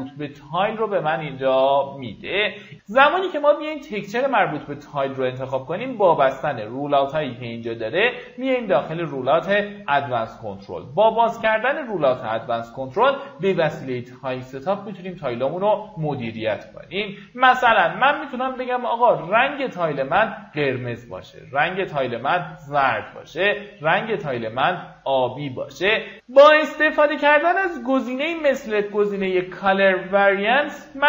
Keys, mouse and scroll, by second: 0.1-2.0 drag, 2.2 scroll up 1, 3.1-23.9 drag, 26.4-29.9 drag.